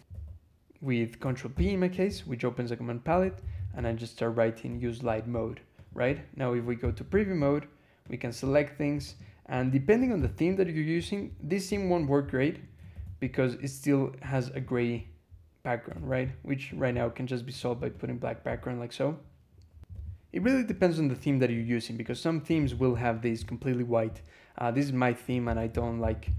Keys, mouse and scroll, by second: 0.0 e, 1.4 ctrl+p, 2.7-4.1 typing, 4.5 Return, 6.7 ctrl+e, 7.9 click, 8.9 shift+click, 9.5 shift+click, 10.0 ctrl+shift+c, 11.2 scroll up 2, 11.7 2, 22.5 l, 23.0 click, 24.0 scroll up 2, 25.3 ctrl+p, 25.6 ctrl+d, 25.7 ctrl+a, 25.9 ctrl+r, 26.1 ctrl+k.